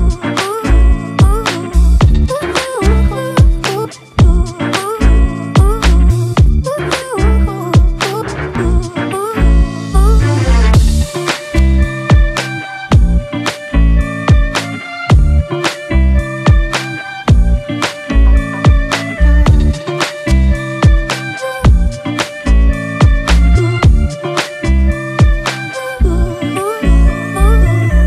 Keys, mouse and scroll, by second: 15.2 alt+click, 21.6 right click, 23.5 typing, 24.0 double click, 25.7 typing, 26.2 double click.